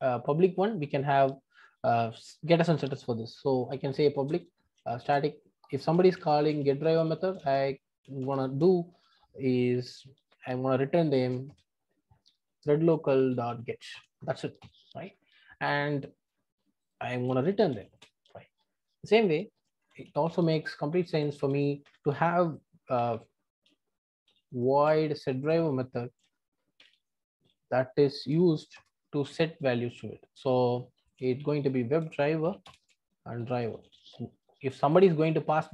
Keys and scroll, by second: 8.2 Return, 13.3 Return, 32.6 Return.